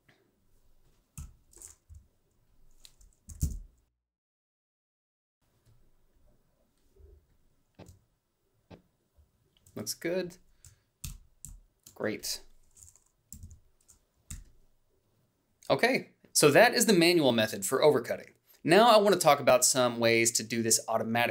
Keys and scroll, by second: 0.9 f, 1.6 i, 3.0 i, 3.1 Down, 3.7 Left, 3.8 o, 4.5 b, 10.8 ctrl+b, 14.0 h.